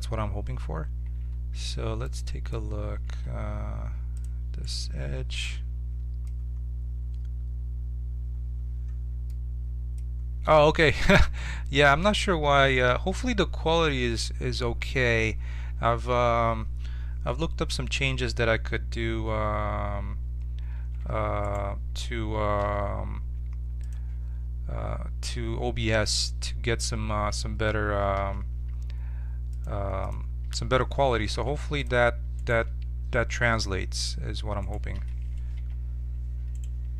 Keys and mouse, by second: 1.2 ctrl+Tab, 3.0 ctrl+Tab, 20.7 shift+w, 28.1 click, 30.4 t, 30.6 click, 31.3 ctrl+Tab, 35.5 j.